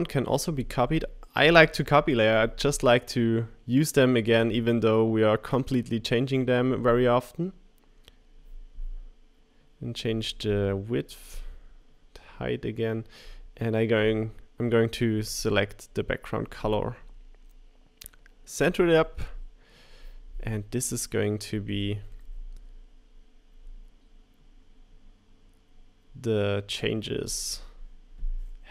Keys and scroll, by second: 0.4 super+v, 1.5 shift+Up.